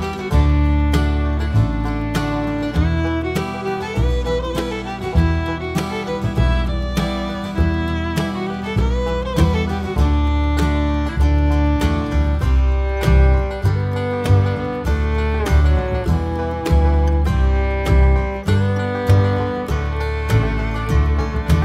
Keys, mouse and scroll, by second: 0.0 click, 3.2 right click, 3.8-5.6 drag, 5.6 scroll up 2, 5.8 click, 5.9 scroll down 2, 6.6-7.3 scroll up 2, 7.3 3, 7.5 alt+click, 7.8 e, 9.9 Tab, 10.4 ctrl+r, 13.2 alt+click, 13.9 KP_1, 14.4 alt+click, 14.7 g, 16.8 Tab, 17.6 scroll down 1, 18.8 click, 19.4 1, 19.7 alt+click, 20.8 e.